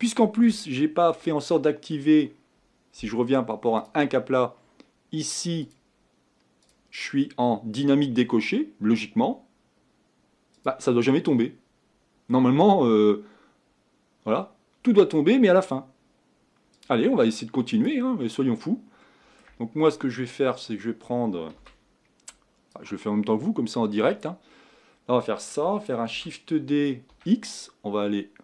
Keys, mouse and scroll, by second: 0.1 middle click, 0.4 scroll down 1, 0.7 shift+middle click, 1.2-1.6 scroll up 1, 1.6-3.9 middle drag, 3.9 click, 6.0 click, 8.5-10.7 scroll down 1, 10.7-18.2 drag, 18.2-19.0 scroll up 4, 19.0 middle click, 19.4-20.7 scroll down 2, 20.7-21.6 scroll down 1, 21.6 KP_1, 24.3 click, 24.7-26.3 scroll up 3, 26.3 shift+d.